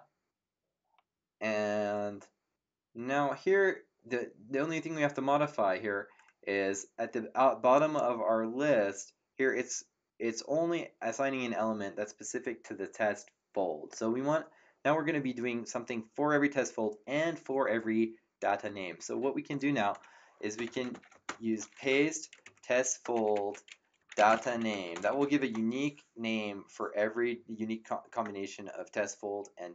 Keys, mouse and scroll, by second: 7.7 click, 20.3-21.7 typing, 22.3 ctrl+Right, 23.1 Left, 23.7-25.8 typing.